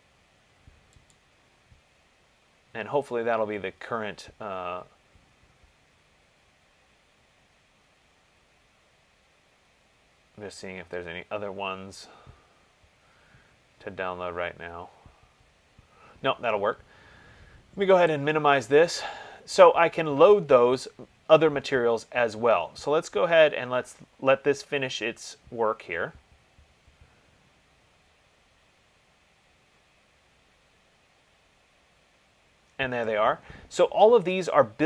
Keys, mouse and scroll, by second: 1.4 click, 3.0-4.0 scroll, 4.0-5.3 scroll, 5.3-6.3 scroll, 6.4 scroll down 10, 6.6-7.6 scroll down 5, 7.7-9.7 scroll down 6, 9.7-10.5 scroll down 2, 10.5 scroll down 1, 10.6 middle click, 11.5 middle click, 11.5 middle click, 12.6 middle click, 12.6 middle click, 13.2 middle click, 13.6 middle click, 13.9 middle click, 14.0 middle click, 14.1 middle click, 14.3-15.4 scroll, 15.4-16.6 scroll, 18.4 click.